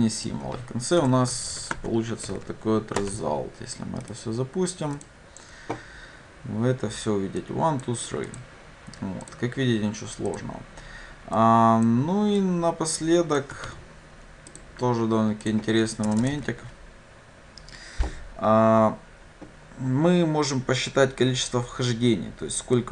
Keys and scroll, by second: 1.8 Tab, 3.0 Return, 5.2 ctrl+shift+F10, 13.7 ctrl+c, 16.4 ctrl+v.